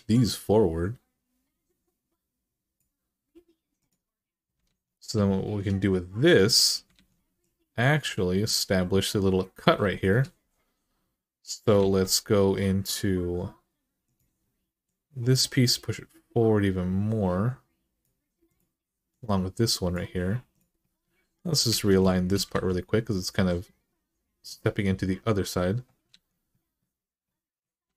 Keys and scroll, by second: 4.4 alt+z, 6.7 alt+z, 11.6 alt+z, 21.5 alt+z, 22.3 alt+z, 25.9 alt+z, 27.7 alt+z.